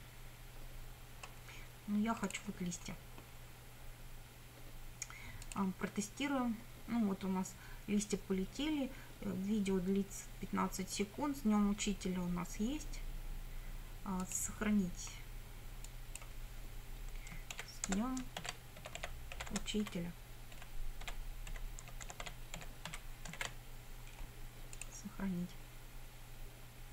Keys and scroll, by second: 17.6-23.4 typing.